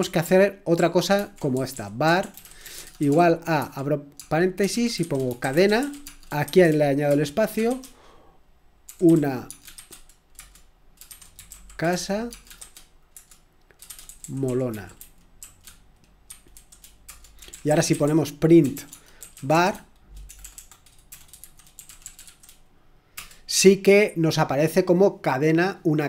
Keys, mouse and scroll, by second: 0.2 ctrl+p, 0.7 ctrl+p, 1.1 ctrl+c, 1.2-7.5 typing, 7.6 Return, 8.6-23.1 typing.